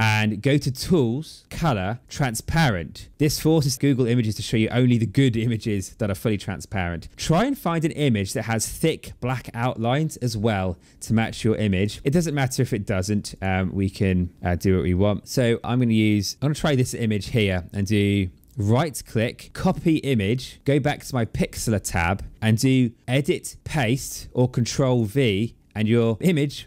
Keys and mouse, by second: 0.6 click, 7.8 click, 11.7 click, 13.2 click, 18.4 right click, 19.8 click, 21.0 click, 23.1 click, 24.7 click, 26.2 click.